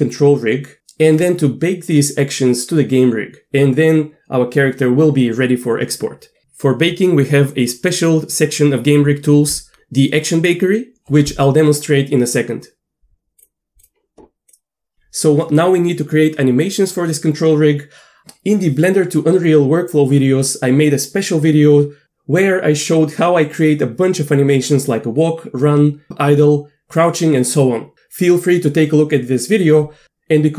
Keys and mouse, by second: 13.8 click.